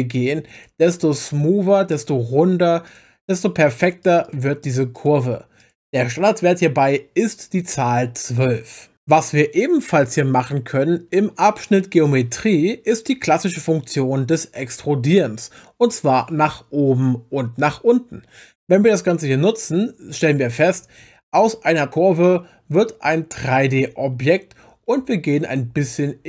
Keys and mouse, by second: 0.5 click, 1.9 click, 2.8 click, 3.3 click, 3.8 click, 4.0 click, 4.2 click, 4.6 click, 4.9 click, 5.6 click, 12.0 click, 18.9-26.2 drag.